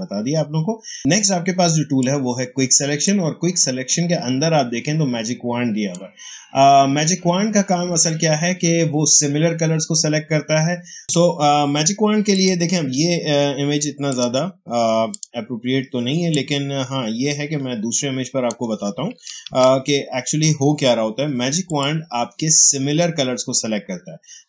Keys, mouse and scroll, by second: 1.0-8.4 drag, 11.0 space, 11.1 ctrl+d, 12.2 click, 14.0 shift+click, 16.0 space, 16.2 click, 16.5 space, 17.5 space, 19.5 ctrl+d, 21.6 click.